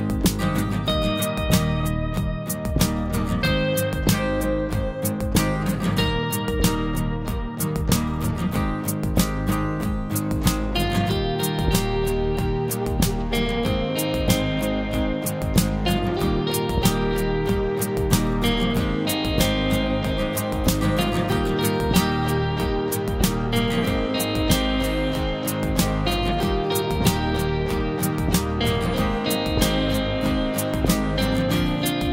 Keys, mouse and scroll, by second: 3.1 typing, 3.9 click, 4.6 scroll down 1, 8.2 typing, 9.9 scroll down 1, 10.2 ], 10.7 click, 11.5 scroll down 1, 11.7 typing, 14.4 scroll up 1, 14.5 typing, 16.4 ctrl+z, 16.4 right click, 17.9 click, 20.3 typing, 21.1 click, 21.1 Right, 24.6 alt+click, 26.2 Up, 26.2 typing, 27.7 click.